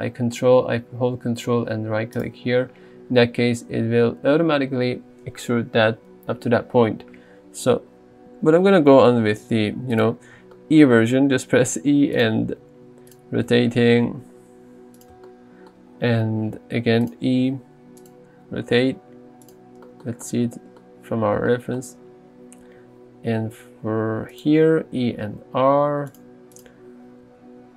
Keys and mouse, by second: 2.2 ctrl+right click, 7.1 ctrl+z, 8.8 e, 10.0 click, 11.6 g, 12.2 click, 12.7 r, 13.1 click, 13.5 g, 15.0 click, 16.4 e, 17.1 click, 17.4 r, 18.0 click, 18.3 g, 19.5 click, 23.4 e, 24.4 click, 24.9 r, 26.2 click, 26.6 click, 27.3 g.